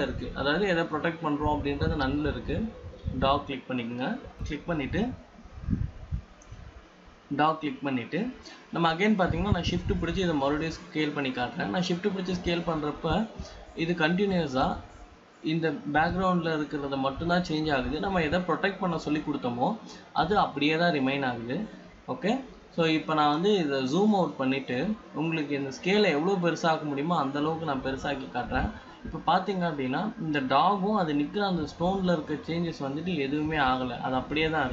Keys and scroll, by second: 26.7 ctrl+-.